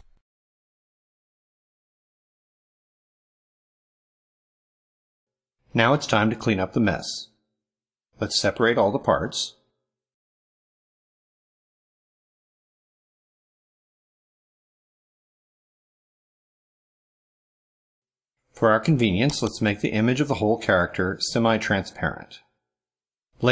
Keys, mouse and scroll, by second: 2.0 click, 3.6 click, 5.6 middle click, 6.1 ctrl+scroll up 1, 7.0 ctrl+middle click, 8.6 click, 9.1 click, 9.3 drag, 9.7 click, 10.0 click, 10.7 click, 11.4-12.5 drag, 12.8 click, 13.1-14.2 drag, 14.4 click, 14.9 click, 15.2 click, 15.8 click, 16.3 drag, 16.8 click, 17.1 click, 17.5 click, 17.7 click, 19.1 click.